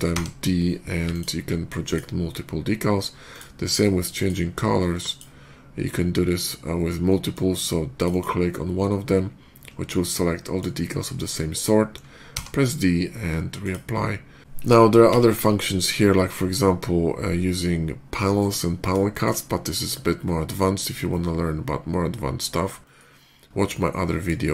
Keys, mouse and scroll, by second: 0.9 alt+click, 1.7 alt+click, 2.5 alt+middle click, 3.2 alt+click, 4.0 click, 4.9 click, 6.9 middle click, 7.8 click, 7.9 click, 9.5 middle drag, 9.8-10.4 middle drag, 12.2 d, 12.9 d, 13.5 click, 14.9 d, 17.5 d, 18.1 right click, 18.6 middle click, 18.9 shift+middle click, 19.3 scroll up 1, 19.6-20.3 shift+middle drag, 20.6-22.2 shift+middle drag, 22.6 shift+middle click, 23.5-24.1 shift+middle drag, 24.3 shift+middle click.